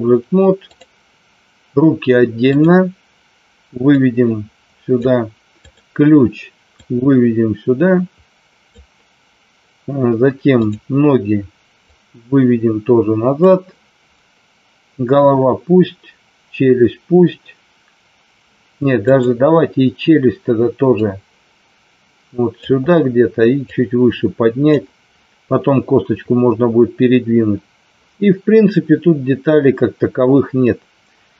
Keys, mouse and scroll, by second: 0.7 click, 4.0-5.0 drag, 5.7 click, 6.8-8.7 drag, 10.6 click, 11.8-13.4 drag, 19.0 click, 20.9-22.6 drag, 23.7-24.7 drag.